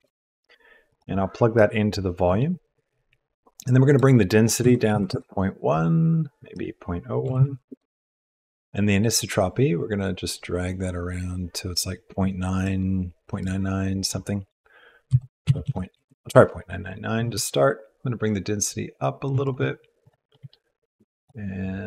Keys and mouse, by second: 1.5-2.6 drag, 3.8-5.1 drag, 6.5-7.7 middle drag, 9.1-12.6 middle drag, 13.4-16.0 middle drag, 15.6 KP_9, 17.4-19.3 shift+drag, 19.4 click, 20.0 click, 21.1 click.